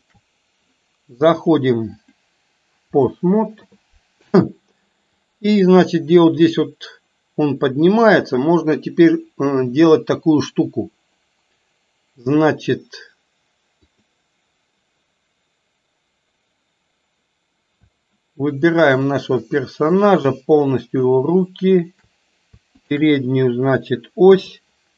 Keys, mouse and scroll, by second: 1.4 click, 2.1-3.2 drag, 5.2-8.0 drag, 13.9 click, 18.8 shift+click, 19.6 middle click, 21.1 shift+drag, 21.9 shift+drag, 22.7-23.1 shift+drag, 24.3 KP_3.